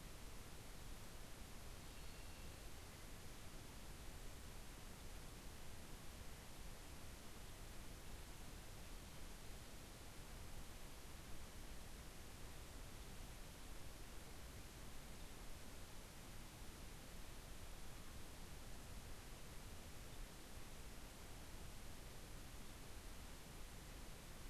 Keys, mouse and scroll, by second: 2.1 click, 4.2-5.1 drag, 5.8-6.7 drag, 7.4 click, 8.5-10.7 drag, 11.3-13.1 drag, 14.2-15.3 drag, 16.3-20.3 drag, 21.3 click, 23.5-24.4 drag.